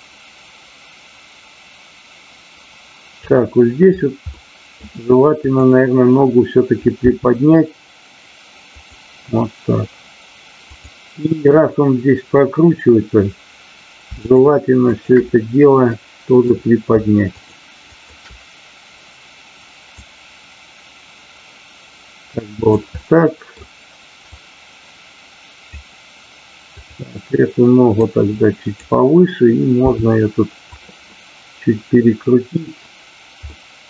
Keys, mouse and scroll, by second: 4.3-4.6 middle drag, 5.4 click, 8.8 click, 10.5-11.3 drag, 14.9 shift+click, 15.9 middle click, 17.3 shift+click, 20.1-22.8 drag, 23.0 middle click, 24.3-25.8 drag, 28.0 click, 29.8 r, 30.6 click, 31.1-32.6 middle drag, 33.5 middle click.